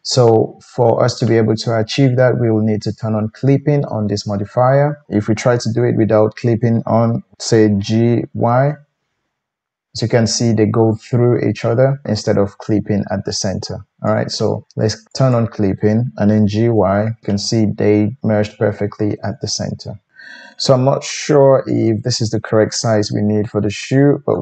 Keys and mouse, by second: 7.8 g, 15.1 click, 15.4-24.4 middle drag, 16.3 g.